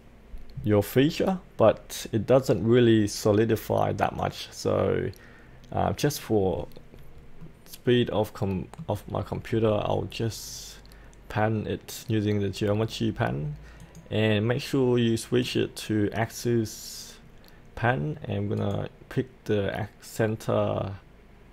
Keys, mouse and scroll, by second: 6.2-7.4 scroll up 1, 7.4-9.2 middle drag, 9.2-11.7 scroll down 1, 11.7-13.8 scroll up 1, 13.8 click, 17.1-18.6 scroll down 1, 18.6-19.7 drag.